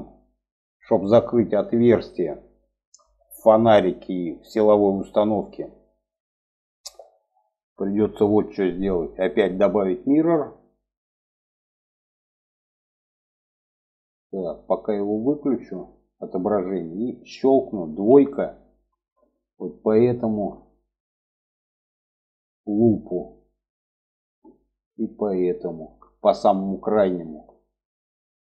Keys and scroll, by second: 17.5 2.